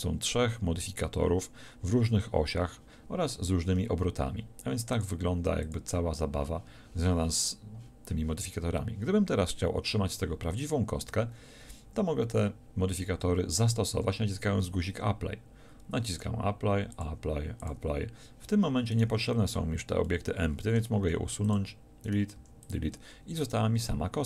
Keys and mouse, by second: 4.9-7.9 drag, 16.1-21.0 drag, 21.0 x, 22.4 x.